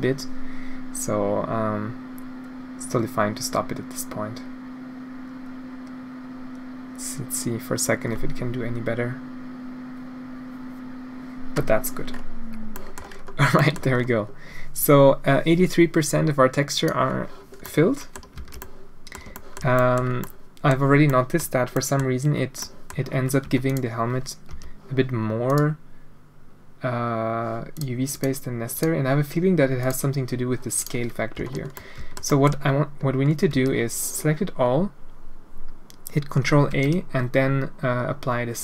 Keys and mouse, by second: 0.7 click, 12.7 middle click, 13.5 middle click, 15.6-16.8 drag, 17.6 middle click, 18.3 alt+a, 18.6 middle click, 19.3 shift+middle click, 19.7 middle click, 20.2 middle click, 21.1 middle click, 21.7 middle click, 22.6 middle click, 22.7 click, 23.4 Tab, 23.6 click, 24.5 n, 25.4 click, 28.1 click, 28.7 click, 29.8 click, 30.8 click, 31.4 a, 31.7 middle drag, 32.0 alt+shift+click, 32.2 drag, 33.4 a, 36.7 ctrl+a.